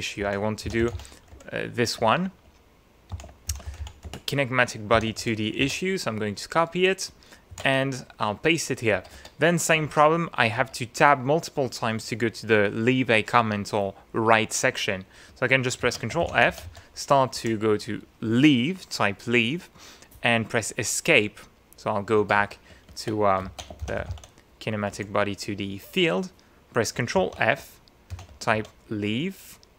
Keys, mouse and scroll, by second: 0.0-1.4 typing, 2.8-5.7 typing, 5.7 alt+shift+Tab, 7.5 ctrl+v, 8.9 Tab, 9.8 shift+Tab, 10.6 shift+Tab, 15.8 ctrl+f, 16.2 ctrl+shift+l, 16.3 ctrl+shift+e, 16.5 ctrl+shift+a, 16.6 ctrl+shift+v, 17.4 Escape, 22.2 shift+Tab, 23.4 ctrl+f, 23.8 ctrl+shift+k, 24.0 ctrl+shift+i, 24.1 ctrl+shift+n, 24.9 Escape, 27.2 ctrl+f, 27.9-29.0 typing.